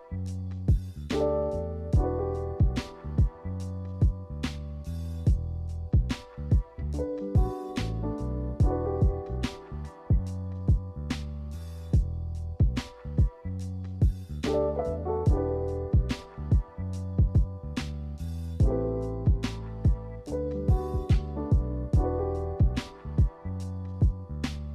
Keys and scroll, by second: 24.1 b.